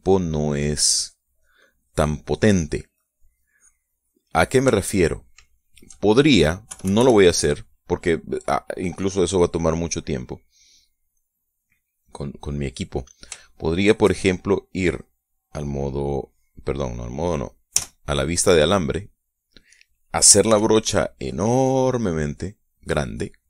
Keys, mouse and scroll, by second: 0.4 middle click, 1.1-5.2 drag, 5.3 shift+middle click, 6.0 shift+middle click, 7.2 KP_Subtract, 7.9 middle click, 12.2 middle click, 13.0 middle click, 13.1 click, 13.9-15.6 shift+middle drag, 15.6 click, 18.3 z, 21.0 f, 22.8 click.